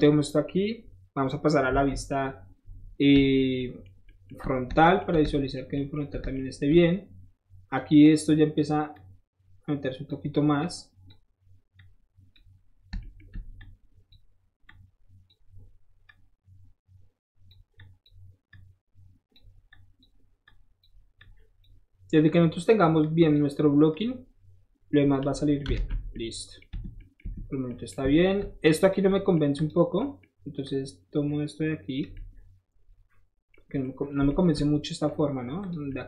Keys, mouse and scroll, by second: 0.0 middle click, 1.8 KP_1, 3.6-5.8 shift+middle drag, 7.7 shift+click, 8.9-10.1 shift+drag, 10.6 click, 11.8 click, 12.8 middle click, 13.6 shift+click, 14.7 shift+click, 16.1-17.5 drag, 17.8 click, 18.5 click, 19.7 click, 20.4 click, 21.2 click, 22.2 click, 23.0 click, 23.9-25.1 drag, 25.4 middle click, 25.8 alt+z, 26.0 middle click, 26.7 Tab, 27.2 Tab, 28.1 shift+middle click, 28.8 shift+click, 29.1 shift+middle click, 29.6 shift+click, 30.0-32.1 shift+middle drag, 30.6-32.0 shift+drag, 33.5 middle click, 34.2 middle click, 35.6 shift+click.